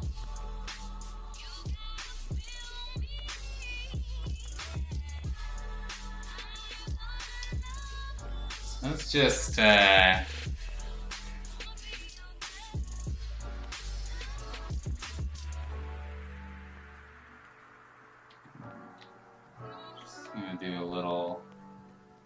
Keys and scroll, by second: 3.6 ctrl+z, 15.0 ctrl+z, 18.2 x, 18.9 ctrl+z, 19.8 ctrl+z, 20.5 3.